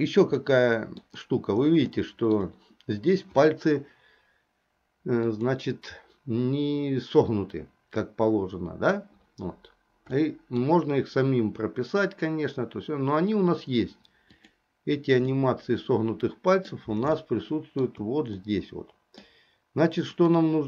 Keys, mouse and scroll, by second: 0.6 middle click, 2.2 shift+middle click, 5.4 click, 10.2 middle click, 14.5 click, 15.4-16.8 middle drag, 17.4 shift+middle click, 18.6 middle click, 20.3 click.